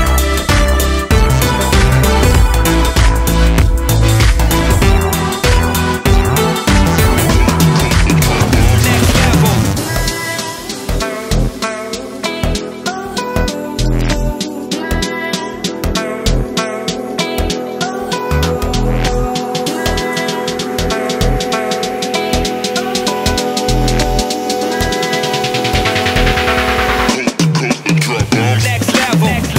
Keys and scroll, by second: 7.8-10.6 [, 10.9 [, 11.9 ], 13.6 [, 22.6 ctrl+z.